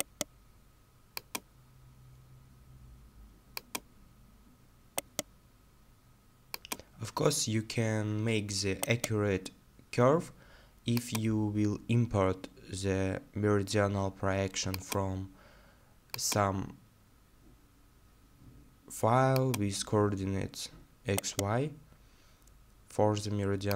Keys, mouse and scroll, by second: 0.0-0.3 scroll down 1, 1.5-1.9 scroll down 1, 4.0-4.3 scroll down 1, 5.0 right click, 6.9 scroll down 1, 8.9 right click, 16.5 scroll down 1, 19.7-20.4 scroll down 1, 21.2 right click.